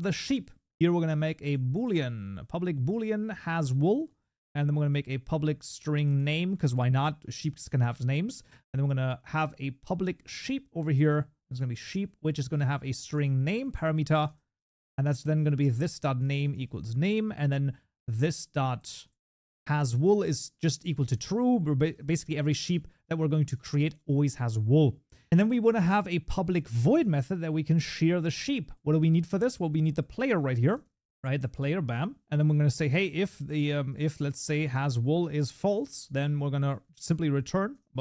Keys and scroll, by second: 2.9 Tab, 10.5 Tab, 16.2 Tab, 22.2 ctrl+s, 30.7 Tab, 35.1 Tab.